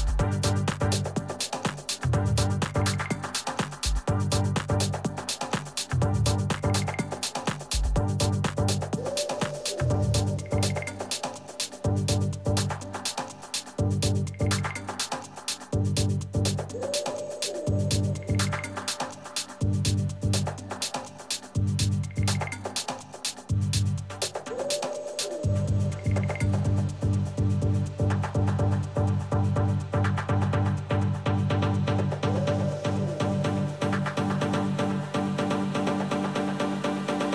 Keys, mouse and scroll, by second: 1.2-3.0 right drag, 3.0 h, 3.5-5.4 middle drag, 5.4-7.3 right drag, 6.2 click, 6.2-10.3 middle drag, 10.4 z, 11.4-12.5 middle drag, 12.7 s, 24.6 KP_3, 25.3 z, 29.8-31.5 middle drag, 31.5 Tab, 32.3 a, 33.4-35.3 middle drag, 34.4 z, 36.3-37.3 drag, 36.8 a, 37.1 a.